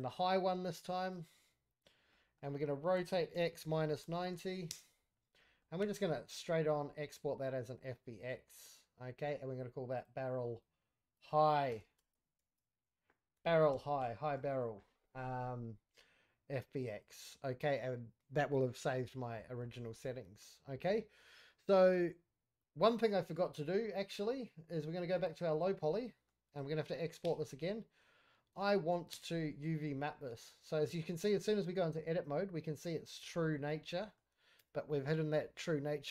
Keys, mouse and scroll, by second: 2.1 middle click, 2.5-2.9 scroll up 1, 2.9 r, 5.3 middle click, 5.8 q, 18.9-19.4 middle drag, 19.4 scroll up 3, 19.7 shift+middle drag, 20.0-20.4 scroll down 2, 20.4-21.2 middle drag, 22.7-23.4 scroll down 1, 25.1 click, 25.4 click, 25.8 scroll down 2, 26.0 middle drag, 26.3 scroll up 1, 26.4 click, 27.2 q, 29.1 Tab, 29.6 a, 30.8 Tab, 31.4 Tab, 31.8 scroll up 1, 31.9 middle click, 32.3-33.0 scroll up 2, 33.0 middle click, 33.6 scroll up 1, 33.7 middle click, 34.3 scroll down 1, 34.6 Tab, 35.0-35.8 middle drag.